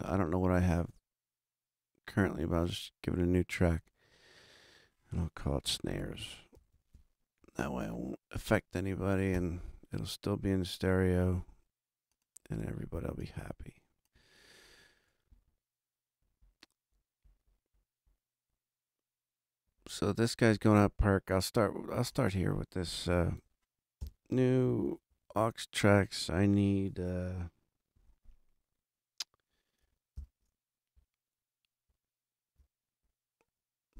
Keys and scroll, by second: 5.7-7.4 typing, 9.3 Return, 24.0 shift+super+n, 24.8 shift+super+Right, 25.1 super+Down, 30.1 shift+super+n, 31.8 super+Down.